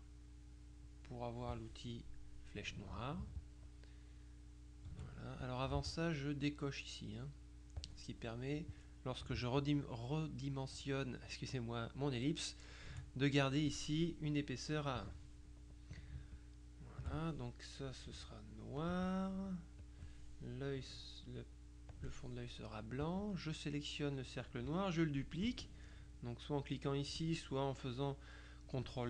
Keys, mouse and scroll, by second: 0.9 click, 3.5-5.4 ctrl+shift+drag, 5.8 ctrl+z, 7.9 click, 9.7-13.4 ctrl+shift+drag, 16.4 ctrl+shift+click, 18.9 click, 19.9 click, 22.0 click, 23.1 click.